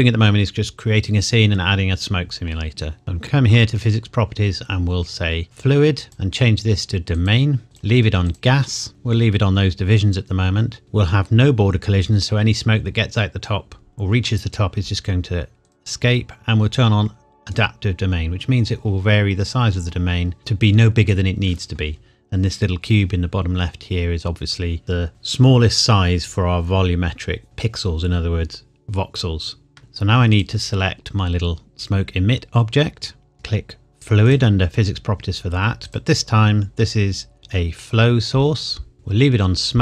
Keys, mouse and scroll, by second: 3.2 click, 5.4 click, 15.6 click, 20.4 middle click, 29.8 ctrl+s, 30.4 click, 34.2 click, 36.0-37.4 scroll up 1, 37.8 click.